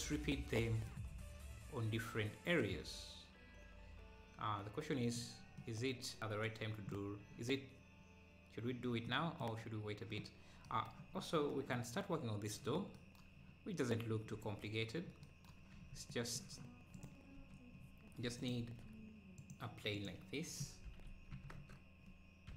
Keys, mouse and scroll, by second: 0.3 middle click, 1.1-2.4 scroll down 1, 2.4 scroll down 2, 5.6-7.0 middle drag, 7.0-7.3 scroll up 2, 9.1-10.7 middle drag, 11.2-11.6 scroll up 3, 12.1 scroll up 1, 13.7-14.4 scroll down 1, 14.4 ctrl+s, 14.7-15.2 scroll up 1, 15.3-15.9 scroll down 1, 15.9 ctrl+s, 16.1-17.4 middle drag, 16.9 click, 17.4 KP_1, 17.7 KP_1, 17.8 scroll up 1, 18.4 scroll up 2, 18.4 shift+right click, 20.9 shift+a, 20.9 r.